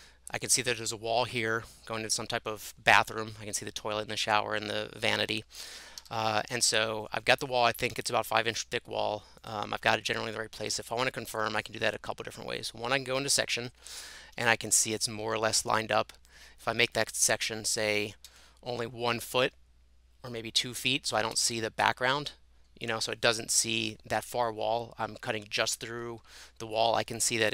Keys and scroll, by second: 5.4-6.5 typing, 7.9-8.7 typing, 10.6 Escape, 14.3 Escape, 18.0 1, 18.2 Tab, 21.3 Tab.